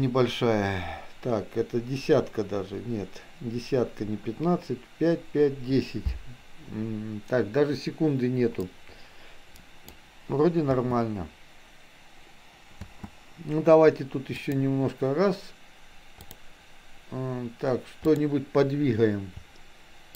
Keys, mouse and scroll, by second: 8.7-10.1 drag, 10.8 space, 14.6 click, 16.2 click.